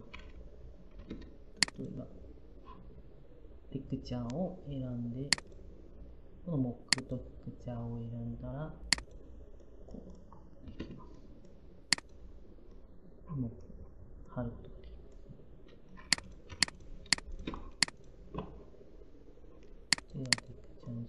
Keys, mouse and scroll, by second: 0.0 f, 16.3 p.